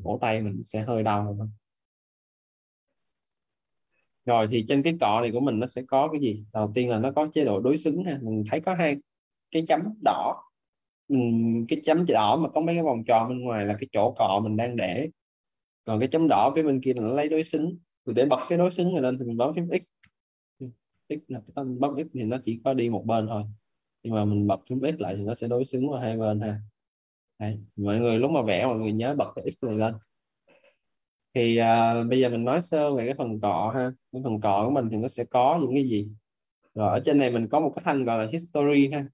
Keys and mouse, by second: 4.9 right click, 5.3 right click, 10.1 right click, 19.9 x, 22.1 click, 23.8 ctrl+z, 24.6 x, 25.0 click, 33.9 ctrl+z, 35.3 right click.